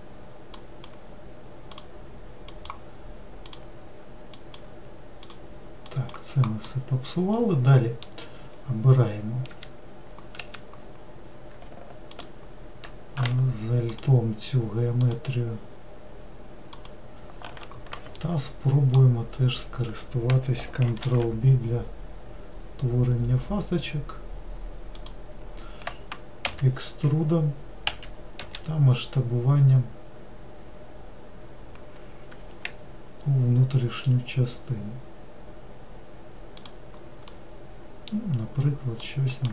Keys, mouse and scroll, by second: 0.5 click, 1.7 click, 2.5 click, 3.4 click, 4.4 click, 5.2 click, 5.9 click, 6.6-9.5 middle drag, 9.5 q, 10.4 w, 12.1 alt+click, 13.9 alt+shift+click, 15.0 alt+shift+click, 16.7 alt+shift+click, 18.1-19.3 middle drag, 19.3 scroll up 2, 21.0 ctrl+b, 26.5 e, 28.4 s, 37.3-39.5 middle drag.